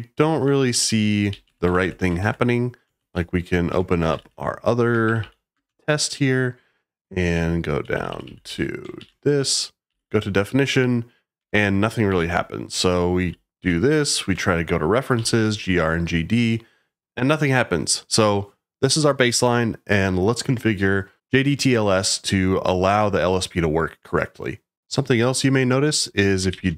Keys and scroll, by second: 0.0-4.7 typing, 3.7 Escape, 5.1 Page_Down, 5.2 Page_Down, 5.6 Return, 7.1-10.3 typing, 11.3 Escape, 12.0 typing, 12.7 Escape, 13.2-13.6 typing, 14.2 Escape, 15.1 g, 26.2-26.7 typing.